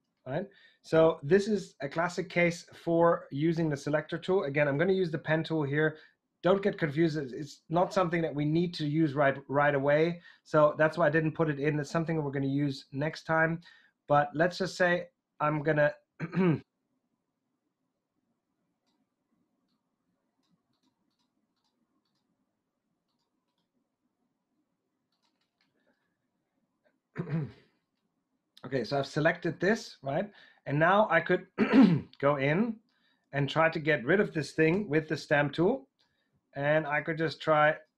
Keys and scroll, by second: 4.6 p, 34.6 alt+s.